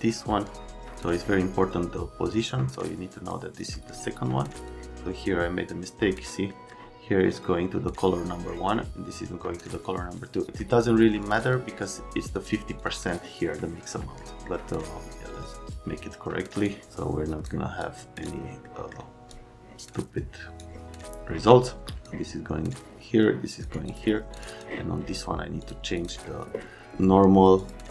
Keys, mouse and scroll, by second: 0.0 click, 6.4 middle click, 11.2 click, 11.4 click, 12.4 click, 12.7 click, 12.8 click, 14.2 middle click, 15.7-16.6 scroll down 1, 16.9 click, 17.8 click, 18.6 scroll down 1, 19.3 click, 21.8 click, 22.7 click, 23.9 click, 24.3 click, 24.4 click, 25.6 click, 25.9 click.